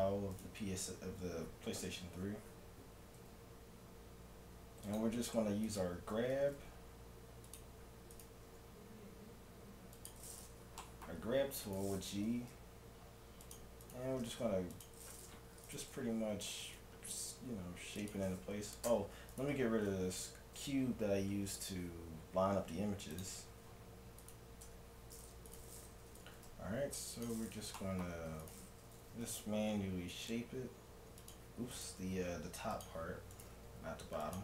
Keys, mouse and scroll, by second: 0.0-2.1 right drag, 1.8 KP_Decimal, 2.3-4.9 middle drag, 3.2 g, 5.1 middle click, 5.7-7.5 right drag, 6.3 g, 8.1-9.9 right drag, 8.5 g, 10.8-13.2 middle drag, 11.7-13.5 right drag, 12.2 g, 13.5 middle click, 13.9-17.5 right drag, 14.2 g, 16.5 g, 18.9 Tab, 19.4-21.1 right drag, 20.9-22.5 middle drag, 22.6 x, 24.2-27.3 right drag, 24.7 Tab, 26.2 g, 27.8 middle click, 28.0 middle click, 28.2 middle click, 29.0 g, 29.6 right click, 31.7-34.4 right drag, 31.9 g, 33.5 g.